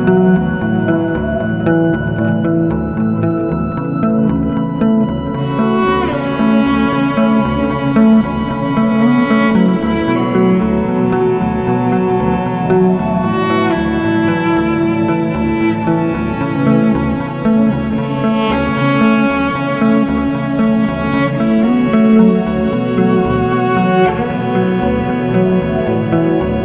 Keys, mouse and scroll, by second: 2.5-8.0 middle drag, 8.0 click, 9.1-10.5 scroll down 2, 10.5-11.2 drag, 11.2-12.3 scroll down 3, 12.3-14.9 drag, 17.4-20.0 drag, 20.5-23.9 middle drag, 25.5 click.